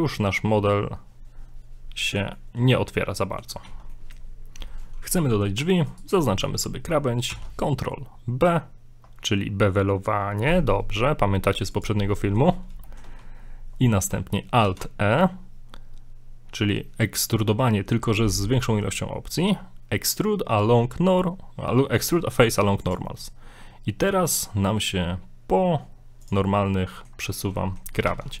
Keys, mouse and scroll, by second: 2.4 middle click, 3.0 middle click, 3.7 ctrl+z, 3.9 middle click, 5.3 middle click, 5.9 alt+right click, 7.3 ctrl+b, 12.1 middle click, 12.5 scroll up 1, 12.9 shift+middle click, 13.2 scroll up 1, 14.7 alt+e, 26.5 scroll down 5, 26.7 middle click, 27.3-27.6 scroll up 4, 27.6 middle click, 28.1 ctrl+z, 28.3 middle click.